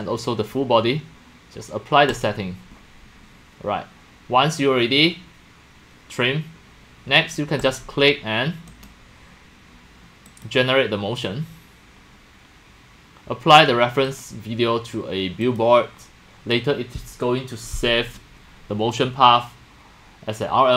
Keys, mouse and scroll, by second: 2.1 click, 2.3 click, 7.2 click, 7.6 scroll up 1, 7.8 click, 8.9-10.5 right drag, 10.3 scroll up 1, 14.1 click, 15.4 middle click, 17.8-20.7 drag.